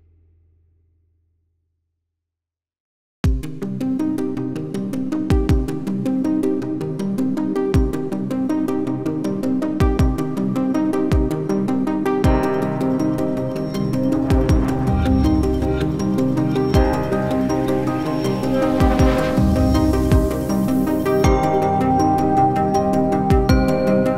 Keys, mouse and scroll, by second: 1.0 scroll down 1, 9.4 ctrl+v, 11.1 scroll down 1, 11.9 alt+click, 14.8 scroll down 1, 16.6 scroll up 1, 16.7 alt+click, 17.7 alt+click, 17.8 alt+middle click, 18.1 alt+scroll up 1, 18.3 alt+click, 20.1-20.7 scroll down 1, 22.1-22.7 scroll down 1.